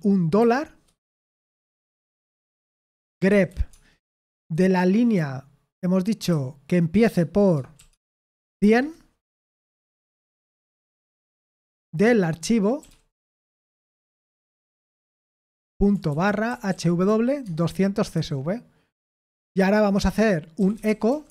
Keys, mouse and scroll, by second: 0.4 typing, 1.8-4.0 typing, 6.3 typing, 8.2-10.1 typing, 9.7 Escape, 11.5-12.9 typing, 15.8-17.4 typing, 19.5-21.3 typing.